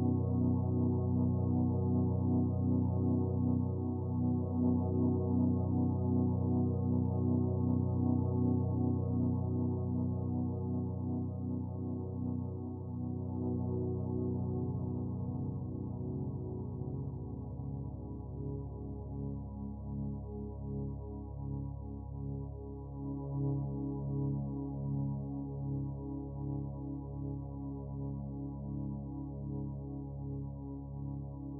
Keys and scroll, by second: 6.4 ctrl+t, 16.4 ctrl+z.